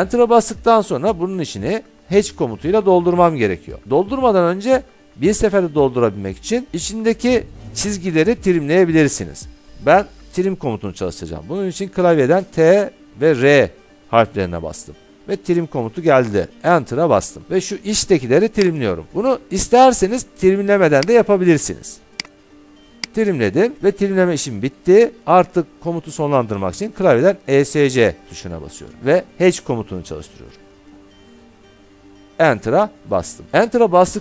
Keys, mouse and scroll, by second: 1.9 middle click, 2.6 middle click, 3.3 middle click, 12.2 t, 13.3 r, 14.6 Caps_Lock, 16.6 Return, 18.9 click, 21.3 click, 27.7 Escape, 30.4-31.4 typing, 32.6 Return.